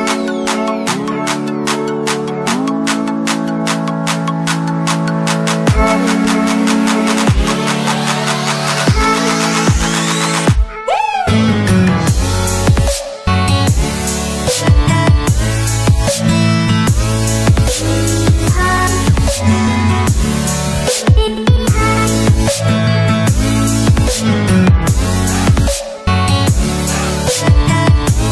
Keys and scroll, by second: 28.1 Delete.